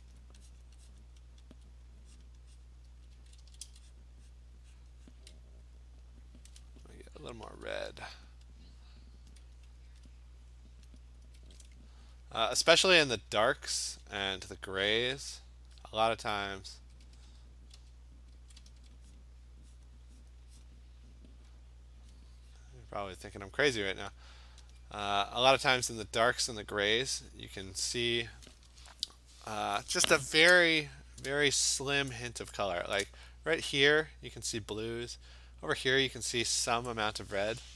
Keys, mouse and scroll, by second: 0.1 alt+click, 0.6 click, 1.0 click, 1.6 alt+click, 2.2 click, 2.7 click, 2.9 [, 3.1 [, 3.4 [, 3.6 [, 4.0 click, 4.4 click, 4.8 click, 5.2 click, 5.3 alt+click, 7.6 click, 9.3 click, 9.8 click, 10.9 click, 11.4 Return, 12.4-13.9 typing, 15.2 click, 15.9 click, 16.6 click, 16.8-18.8 typing, 17.4 click, 17.8 Return, 18.3 click, 19.2 click, 19.8 click, 20.3 click, 20.7 click, 21.2 click, 21.2 [, 22.1 click, 22.6 click, 22.9 click, 23.1 click, 23.9 click, 24.7 alt+click, 26.4 click, 27.7-32.1 click, 31.8 click, 31.9 click, 32.1 click, 32.3 click, 32.4 click, 32.5 click, 33.0 click, 37.6-37.7 click.